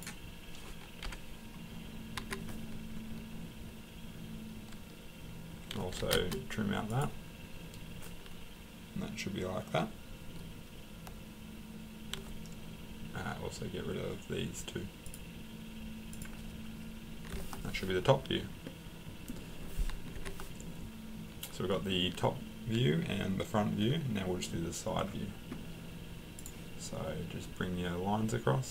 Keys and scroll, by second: 1.0 Delete, 2.2 Escape, 5.7-6.5 typing, 20.1 Escape.